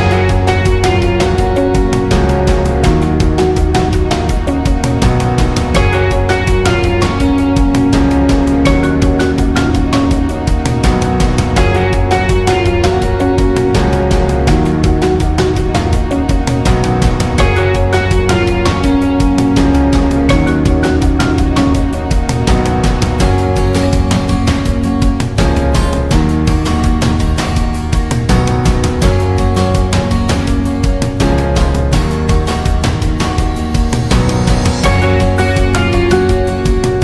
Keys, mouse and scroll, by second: 2.5 ctrl+g, 3.4 click, 3.9 scroll down 1, 4.1 space, 4.2 click, 4.5 space, 5.4 click, 10.1-16.8 drag, 16.8-18.2 alt+shift+drag, 18.6 alt+scroll up 1, 18.8 space, 18.9 click, 19.3 space, 20.0-30.0 drag, 30.7 alt+scroll down 1, 31.0 space, 31.2 click, 31.5 space, 31.7 space, 33.4 alt+scroll up 1, 33.6 space, 33.8 click, 34.1 space.